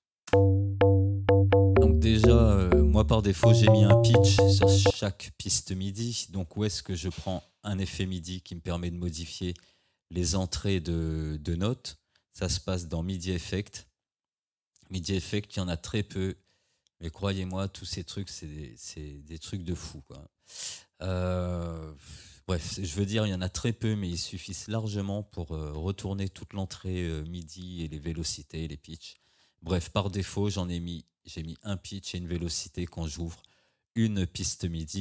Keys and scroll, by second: 0.3 space, 4.9 space.